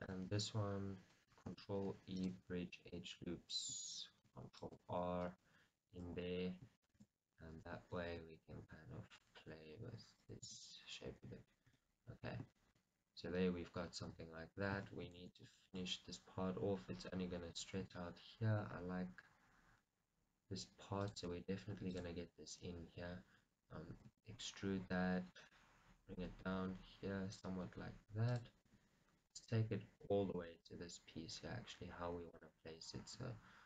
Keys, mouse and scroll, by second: 0.1-1.6 alt+shift+drag, 1.6 ctrl+e, 2.9-5.6 middle drag, 5.6 right click, 7.1-8.8 shift+drag, 8.2 s, 9.3 click, 10.0 g, 10.5 click, 10.6 shift+middle click, 12.2-12.7 scroll down 2, 12.7-17.5 shift+middle drag, 14.5 Tab, 15.3 shift+z, 17.9-21.4 middle drag, 17.9 scroll up 2, 18.2 Tab, 21.4-22.4 drag, 22.4 middle click, 24.4 e, 25.7 right click, 26.6 g, 28.8 click, 29.1 r, 30.3 click, 30.8 g, 32.6 click, 33.4 r.